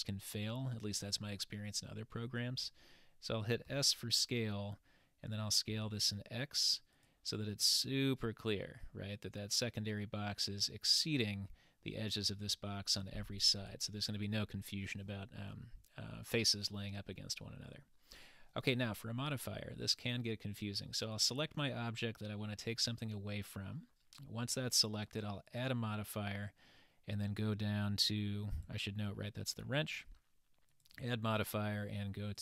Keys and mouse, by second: 7.7-10.7 middle drag, 13.6 click, 17.2-17.9 middle drag, 21.2 click, 25.5-28.4 drag, 28.6 click, 30.8-32.4 drag.